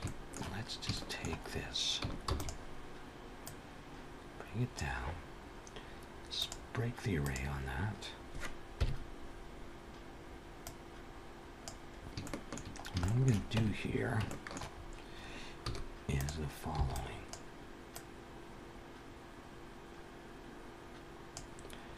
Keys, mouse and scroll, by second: 0.0 click, 0.8 shift+middle click, 2.1 shift+d, 3.3 click, 6.1 click, 7.3 click, 8.5 KP_1, 10.5 click, 11.8-12.1 scroll up 3, 12.1 shift+middle click, 12.9 shift+middle click, 13.4 Tab, 13.6-15.2 scroll up 5, 14.1 shift+middle click, 15.5 z, 16.6 b, 17.8 click.